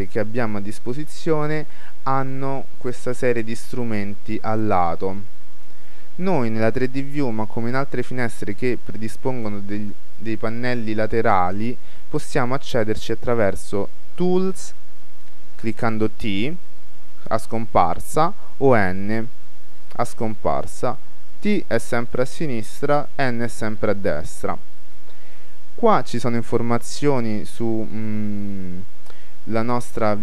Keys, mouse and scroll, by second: 2.8-5.5 middle drag, 2.8-3.4 scroll down 1, 14.1 t, 14.5 t, 16.6 t, 17.0 t, 18.7 n, 19.5 n, 19.9 n, 20.3 n, 21.4 t, 21.9 t, 23.1 n, 23.5 n, 23.8 n, 25.6-29.1 middle drag, 25.7-26.5 scroll up 1, 29.9-30.2 drag.